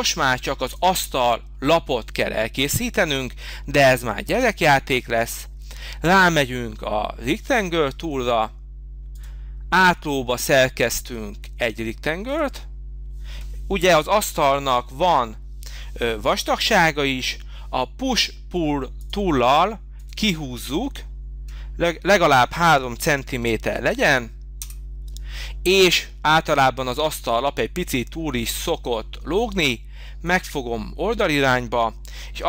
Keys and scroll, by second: 24.6 Return.